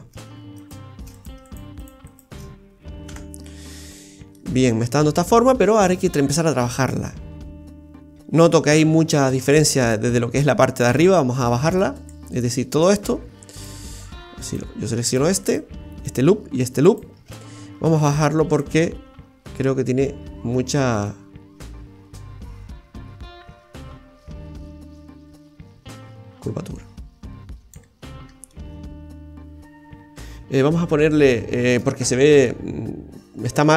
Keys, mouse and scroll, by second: 0.6 alt+shift+right click, 1.1 right click, 1.4 alt+shift+right click, 1.8 right click, 2.1 alt+shift+right click, 3.1 f, 3.4-3.8 scroll down 5, 3.9 middle click, 4.5-4.8 scroll up 5, 12.0 alt+shift+right click, 12.8 alt+shift+right click, 14.4 right click, 15.0 shift+right click, 15.4 alt+shift+right click, 16.0 shift+right click, 16.8 alt+shift+right click, 18.6 click, 28.1 scroll down 2, 28.5 middle click, 29.4 middle click, 29.8 middle click, 31.3 Tab, 32.4 a.